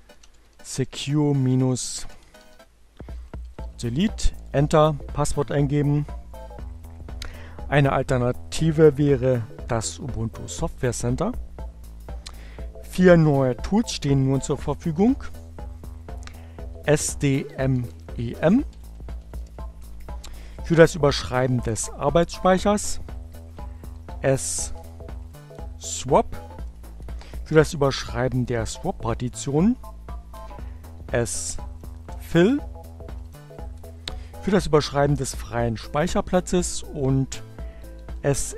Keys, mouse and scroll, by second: 0.0-3.9 typing, 15.9-19.5 typing, 19.7 Return, 23.4-24.6 typing, 25.8-27.0 typing, 29.0 s, 31.0-33.9 typing, 36.4-37.3 typing.